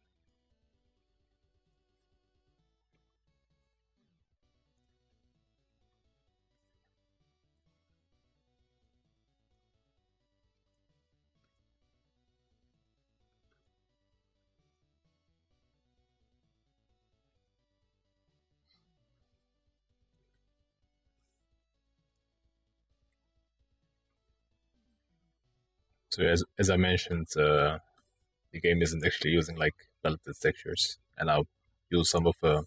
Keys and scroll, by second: 0.2 ctrl+z, 1.1-4.4 ctrl+z, 4.9 ctrl+z, 5.5 ctrl+z, 5.8 ctrl+z, 5.9 ctrl+z.